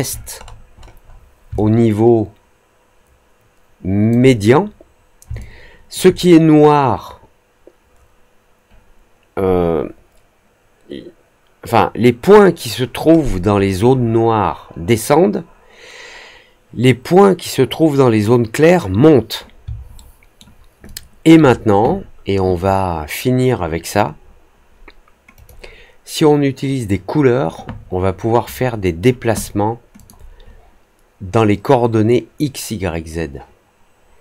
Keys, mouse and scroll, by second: 0.3 middle click, 0.7 middle click, 0.9 middle click, 1.5-4.0 alt+drag, 5.3 alt+click, 13.1 middle click, 13.5-14.1 scroll down 4, 19.9 alt+middle click, 20.8 alt+click, 25.3 click, 29.9 click.